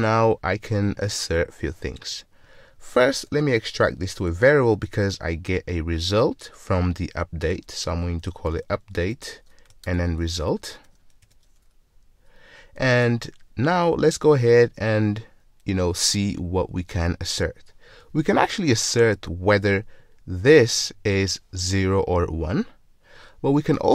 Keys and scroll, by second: 3.7 alt+super+v.